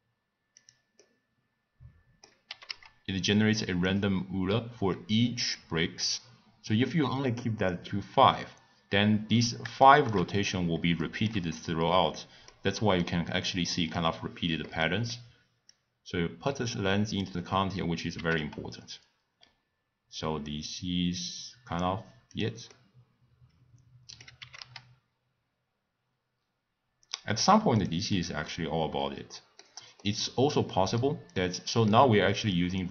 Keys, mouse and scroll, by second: 1.0-2.5 middle drag, 2.5 g, 6.9 click, 9.8-10.2 shift+middle drag, 10.2-11.0 scroll up 1, 11.0-15.7 shift+middle drag, 15.7 click, 18.1 g, 22.7-24.4 middle drag, 24.4 g, 28.1-32.9 middle drag.